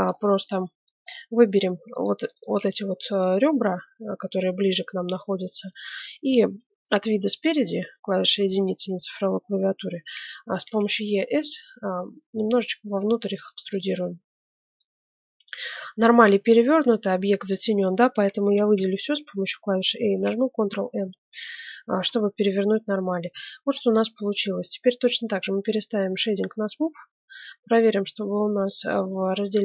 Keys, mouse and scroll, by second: 0.0-1.1 middle drag, 1.9-4.2 right drag, 4.7-7.1 middle drag, 6.7 KP_1, 8.0-9.8 middle drag, 10.5 e, 13.9 middle click, 14.9 middle click, 16.4-18.3 middle drag, 18.4 a, 18.7 a, 20.1 ctrl+n, 21.0 Tab, 22.5 middle click, 24.5-25.5 middle drag, 25.2 z, 27.8-29.5 drag.